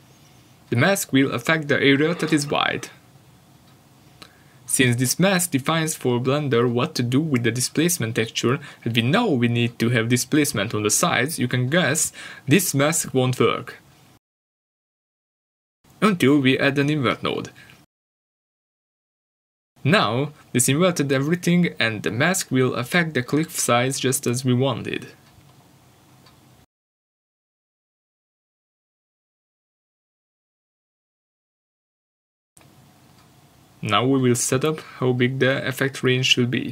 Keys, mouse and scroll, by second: 0.0 click, 0.7 scroll up 1, 8.7 scroll up 1, 10.4 click, 12.2 scroll down 1, 12.9 middle click, 13.3 shift+middle click, 14.3 scroll up 1, 14.7 middle click, 15.3 shift+middle click, 16.4 scroll up 1, 21.6 shift+a, 24.6 click, 25.1 ctrl+shift+click, 26.1 scroll down 1, 28.1 click.